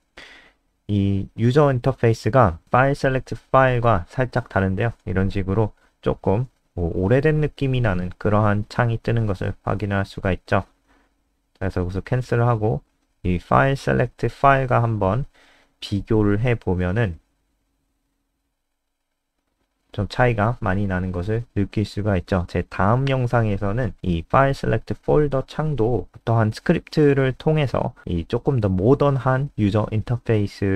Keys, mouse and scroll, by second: 0.5 BackSpace, 0.7 BackSpace, 1.2 ctrl+s, 1.3 Down, 4.5 F5, 8.0 click, 8.8-9.3 scroll down 1, 9.3-10.4 scroll down 1, 10.4-10.9 scroll up 2, 12.5 click, 12.6 scroll down 1, 14.8 Up, 14.9 Up, 15.0-16.7 typing, 16.8 Up, 17.1 Tab, 17.5 Home, 17.7 ctrl+Right, 17.8 ctrl+Right, 18.4 shift+End, 18.7 BackSpace, 18.9 Down, 19.6 Home, 19.8 ;, 20.3 Down, 20.5 Left, 20.7 ;, 21.0 ctrl+s, 21.2 F5, 22.6 click, 26.4 click, 27.0 Up, 27.3 Home, 27.5 Delete, 27.8 Up, 28.1 shift+End, 28.7 Delete, 29.0 ctrl+s, 29.4 Down, 29.7 Delete.